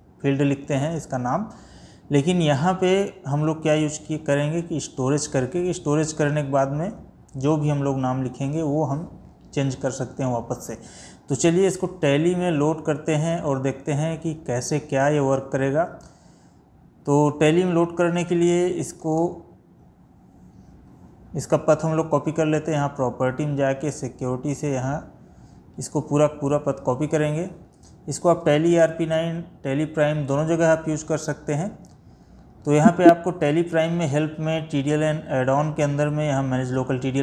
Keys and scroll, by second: 27.8 ctrl+c, 31.3 Escape.